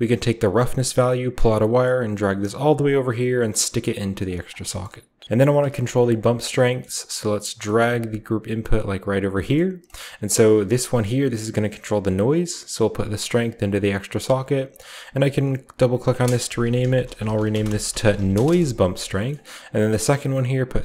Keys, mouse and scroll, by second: 0.6-3.9 drag, 4.0 click, 5.2-6.1 typing, 5.6-7.5 drag, 7.7 typing, 8.6 click, 8.8-10.1 scroll up 1, 10.1-11.1 drag, 11.1 middle drag, 11.4-14.0 drag, 14.1 click, 14.6 click, 15.1 click, 15.3 click, 15.8 click, 16.4-18.5 typing, 19.1-20.8 shift+middle drag, 19.6-20.8 drag.